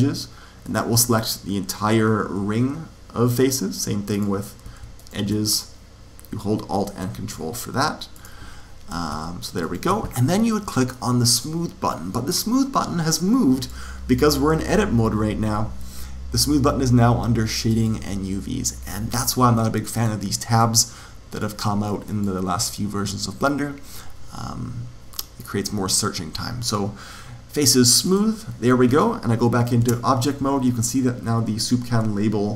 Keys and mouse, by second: 0.6-3.1 middle drag, 4.1 click, 4.9 right click, 6.4 right click, 8.1 click, 9.6 right click, 11.3-13.1 drag, 17.6 click, 19.9-23.7 drag, 28.0 click, 29.7 Tab.